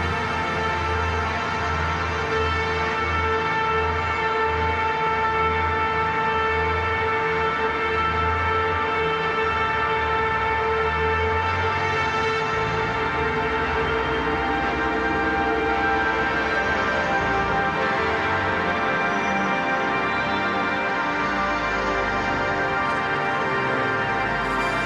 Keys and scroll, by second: 5.1 ctrl+j, 5.3 ctrl+t, 10.8 ctrl+z, 14.2 ctrl+z.